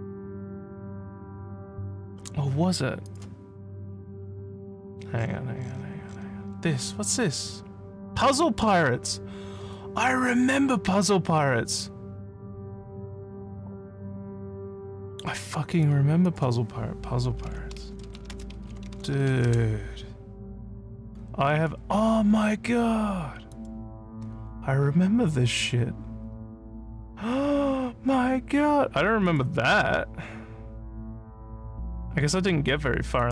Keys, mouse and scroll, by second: 2.2 scroll up 1, 3.1 click, 5.2 scroll down 1, 5.6-6.2 scroll down 5, 6.5 scroll up 1, 7.1-7.6 scroll up 1, 8.1 scroll down 2, 8.6 scroll up 1, 15.8 click, 16.3 click, 18.2-19.8 typing, 23.5 click, 29.2 click, 33.2 click.